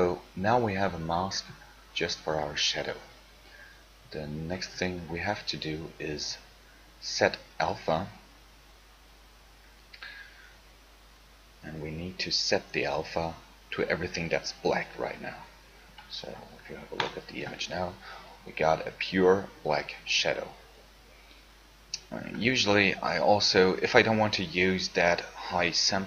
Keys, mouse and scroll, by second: 17.2-18.3 right drag.